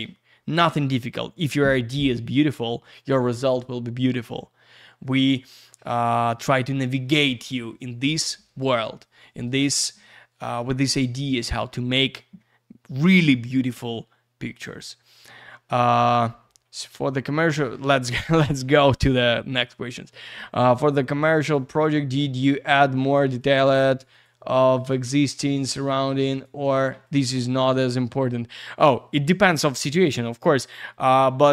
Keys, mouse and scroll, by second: 13.7-15.5 scroll down 1, 20.9 click, 21.8 click, 23.4 click, 24.1 click, 24.2 click, 24.7 click, 24.9 click, 25.6 click, 26.3 click, 26.4 click, 27.0 click.